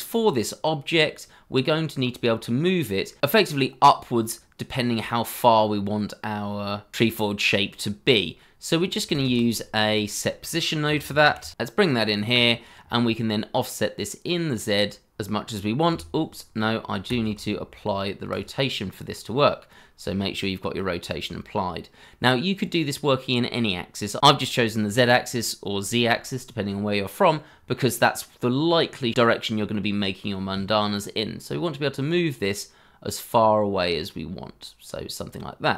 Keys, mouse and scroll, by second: 0.1 scroll up 1, 1.9-2.4 scroll down 1, 3.3-5.3 scroll down 1, 9.2 shift+a, 10.6-11.4 typing, 17.0 ctrl+a, 28.7-29.7 scroll down 1, 29.7-32.8 scroll up 1.